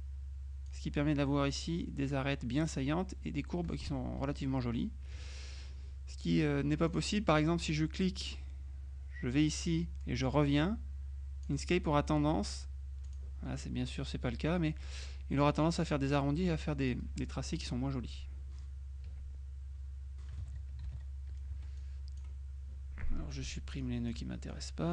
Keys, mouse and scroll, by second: 4.6 F2, 5.2 F1, 6.9 click, 8.0-12.0 drag, 13.2 click, 17.0 click, 19.2 Delete, 20.6 z, 21.6 F2, 21.9 click, 23.6 Delete, 23.9 click, 24.3 Delete.